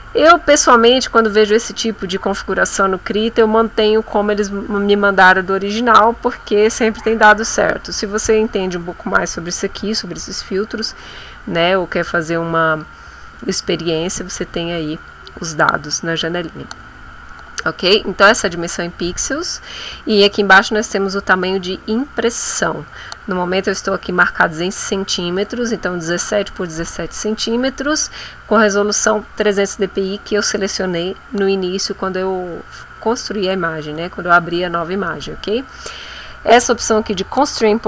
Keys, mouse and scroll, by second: 10.9 click, 14.7 click, 23.7 click, 25.4 click, 29.5 click.